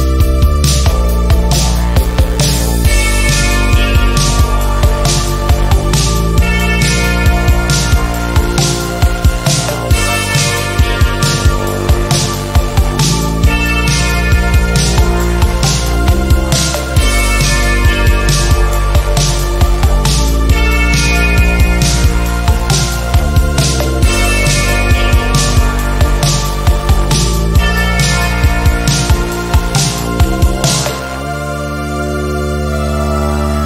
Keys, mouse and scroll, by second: 1.2 ctrl+d, 5.3 click, 6.4 ctrl+z, 7.2 shift+click, 11.3 click, 11.6 ctrl+e, 12.5 click, 14.7 ctrl+z, 15.8-17.0 drag, 23.3 ctrl+z, 24.4 click, 27.6 ctrl+z, 28.0 click, 30.7 h, 31.4 space, 31.7 click, 31.8-32.6 space, 32.9 v, 33.1 click.